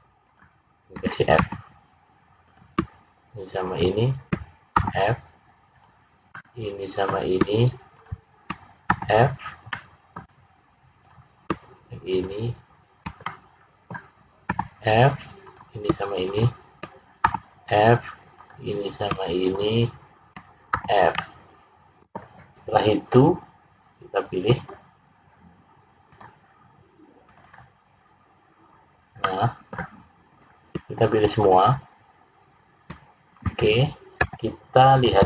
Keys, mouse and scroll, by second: 0.2 shift+click, 1.3 f, 2.4 click, 3.6 shift+click, 4.7 f, 5.7 click, 6.3 middle click, 7.9 shift+click, 8.8 f, 9.6 middle click, 10.9 click, 12.0 shift+click, 13.1 middle click, 14.4 f, 15.4 click, 16.2 shift+click, 17.2 f, 18.3 click, 19.4 shift+click, 20.7 f, 21.1 middle click, 24.3 click, 24.8 click, 26.1 click, 27.2 click, 27.5 click, 28.7 scroll down 1, 29.2 middle click, 31.2 shift+click, 31.7 shift+click, 33.2-34.1 scroll down 3, 34.1 `.